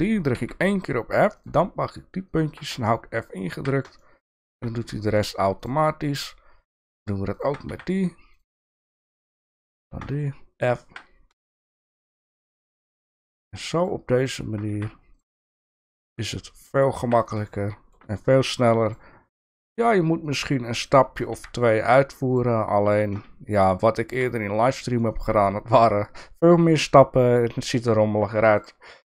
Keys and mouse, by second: 0.3 f, 2.7-3.6 f, 4.0 shift+middle click, 4.9 click, 6.2 shift+click, 7.3 shift+click, 7.7 f, 8.3 shift+click, 10.0-10.9 f, 11.4 shift+middle click, 11.8 click, 12.6 shift+click, 13.1 shift+click, 14.2 shift+click, 14.7 f, 15.1 click, 15.9 click, 16.1-17.1 f, 17.5 shift+middle click, 18.8 shift+click, 20.2 shift+click, 20.9 shift+click, 21.3 f, 21.7 click, 22.4 shift+click, 23.3-24.1 f, 25.0 shift+middle click, 25.4 middle click, 26.4 shift+middle click, 28.2 Tab.